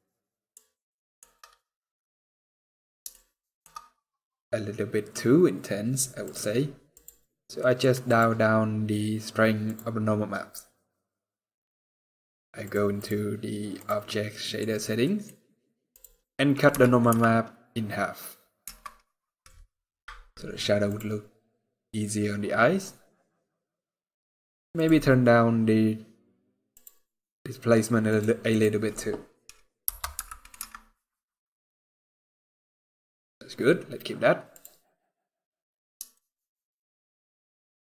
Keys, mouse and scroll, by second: 0.5 shift+middle click, 1.0-1.4 shift+scroll up 5, 2.3-2.7 scroll down 2, 2.8 shift+middle click, 3.4-3.9 scroll up 4, 4.3 scroll down 5, 5.3 scroll down 2, 20.7 click, 21.4 scroll up 3, 22.0-22.5 scroll up 1, 23.2 scroll down 2, 24.5 click, 25.5 scroll down 1, 26.3-26.9 scroll down 3, 26.4 click, 27.4-27.8 scroll down 2, 27.8 click, 32.3 scroll down 3, 32.8 scroll up 3, 33.6 scroll down 1, 34.2 click, 34.2 scroll down 2, 34.9 scroll down 1, 35.0 scroll up 3, 35.8 shift+middle click.